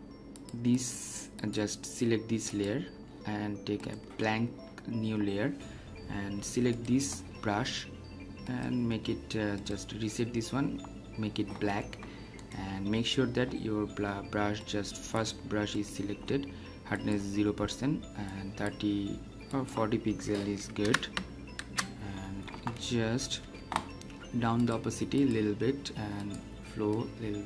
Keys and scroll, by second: 21.5 Return.